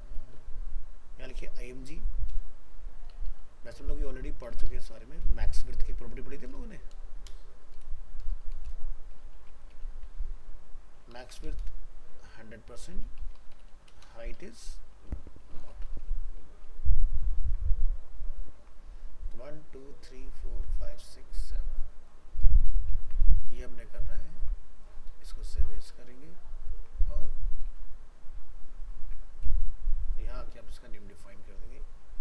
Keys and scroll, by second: 16.5 ctrl+s, 23.0 ctrl+s, 25.2 alt+a, 27.7 alt+f, 27.7 alt+移, 29.0 ctrl+Tab.